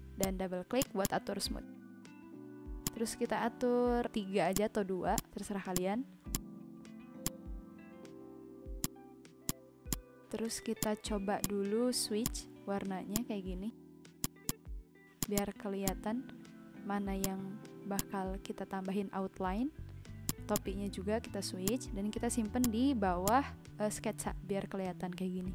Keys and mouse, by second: 0.2 click, 2.8 click, 4.5 click, 4.9 typing, 5.1 click, 7.2 click, 7.9 ctrl+z, 8.8 click, 10.5 v, 10.8 click, 13.1 click, 14.2 click, 17.2 click, 20.2 click, 21.6 click, 22.6 click.